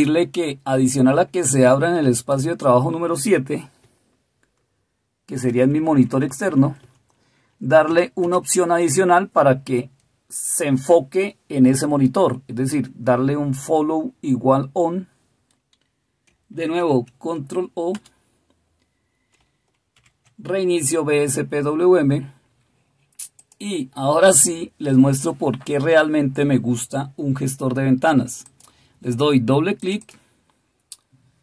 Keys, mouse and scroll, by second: 3.8-5.4 Right, 6.2 Right, 6.9 Right, 7.8 Delete, 8.2 Delete, 16.7 ctrl+o, 17.9 Return, 19.9 alt+super+r.